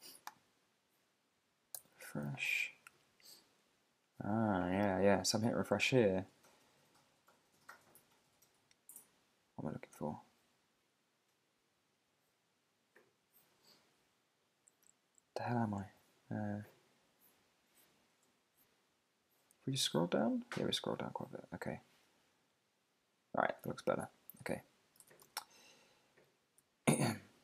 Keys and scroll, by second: 1.7 super+r, 24.1 super+`, 24.4 super+Tab.